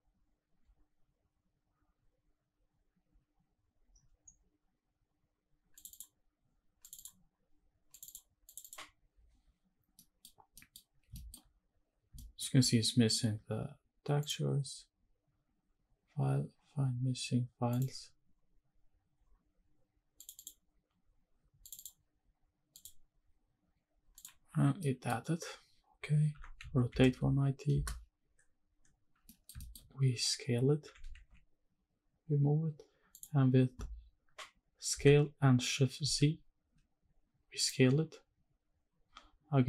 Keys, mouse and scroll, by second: 10.0 middle click, 10.5 middle click, 11.2 shift+middle click, 11.5 scroll up 1, 12.2 shift+middle click, 14.2-17.8 drag, 24.2 click, 24.8 middle click, 26.3 r, 26.6 z, 26.9 KP_9, 27.1 KP_0, 27.7 KP_Enter, 29.3 middle click, 29.6 shift+middle click, 29.9 scroll up 1, 30.3 scroll down 1, 30.5-30.9 scroll up 1, 30.9 g, 31.3 shift+z, 33.1 click, 35.0 s, 36.2 shift+z, 37.6 click.